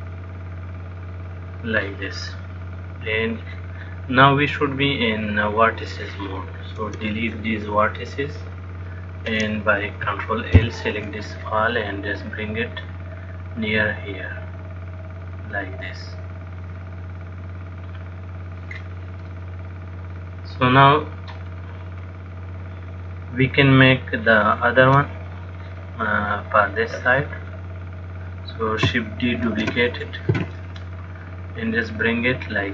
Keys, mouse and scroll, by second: 5.8 click, 7.1 x, 9.4 click, 10.9 ctrl+l, 12.4 click, 19.6 middle click, 30.0 shift+d, 31.5 click.